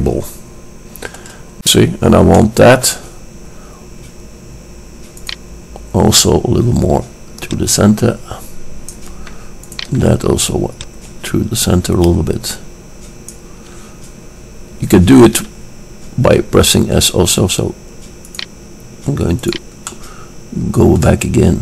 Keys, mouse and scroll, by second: 2.5 click, 2.8-4.3 middle drag, 4.3 click, 5.8-7.3 drag, 7.8-9.5 drag, 9.9-10.8 drag, 10.8 middle click, 11.8 click, 18.5-20.3 drag, 20.3-21.6 middle drag.